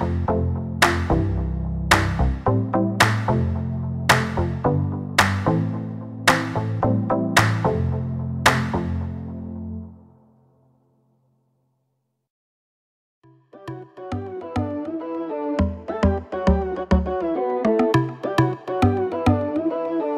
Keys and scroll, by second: 1.2 Escape, 3.1 space, 3.4 p, 6.0 space, 7.8 l, 10.6 r, 11.8 space, 12.3 m, 12.8 Up, 13.7-17.1 typing, 13.9 Return, 15.5 Return.